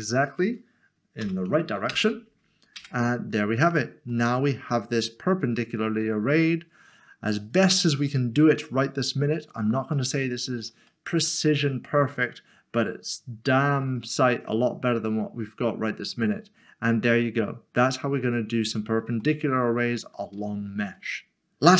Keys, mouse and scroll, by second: 1.2 typing, 1.9 Return, 2.8 Tab, 3.7 click, 4.3 middle click, 9.7 middle click, 11.0 middle click, 19.3 shift+middle click, 20.5 shift+middle click.